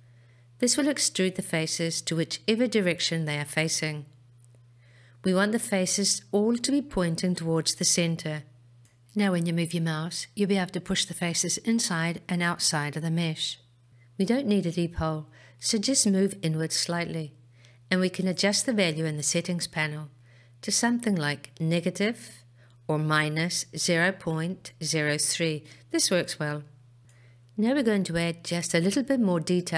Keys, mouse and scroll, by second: 22.9-26.8 drag.